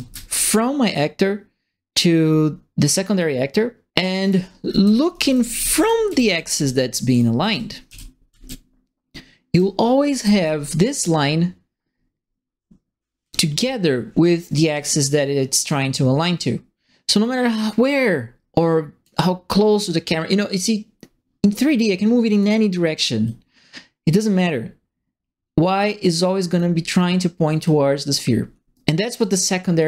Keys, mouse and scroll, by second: 4.0-10.2 typing, 4.2-10.4 right drag, 13.2-17.2 drag, 17.6-19.0 drag, 20.5-22.4 drag, 23.2-26.5 drag, 27.6-29.8 drag.